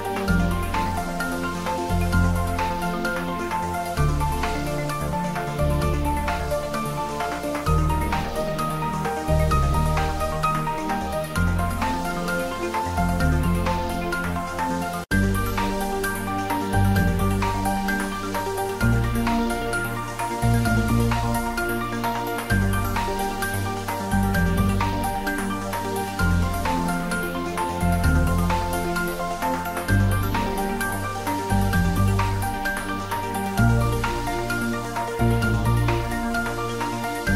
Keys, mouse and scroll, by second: 0.8-3.0 drag, 3.4 click, 4.0 scroll down 1, 4.5 middle click, 5.0 scroll up 1, 6.1 click, 7.2 click, 8.7 click, 9.6 scroll up 1, 10.1-11.8 middle drag, 14.0 click, 27.1 scroll down 1, 27.5-28.4 scroll up 1, 29.4 click, 31.2 click, 31.9 scroll down 1, 32.0 scroll up 1, 32.0 scroll down 1, 33.5-34.9 scroll up 1, 35.9 click.